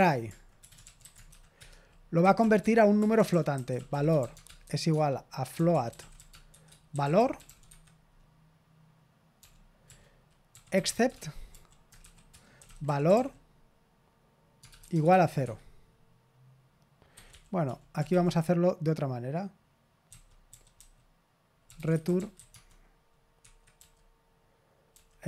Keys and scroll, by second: 0.0-7.9 typing, 9.3-13.6 typing, 14.7-15.0 typing, 15.4 Escape, 17.1 Escape, 17.2-18.5 typing, 19.8-23.7 typing, 23.3 Escape, 24.9 j.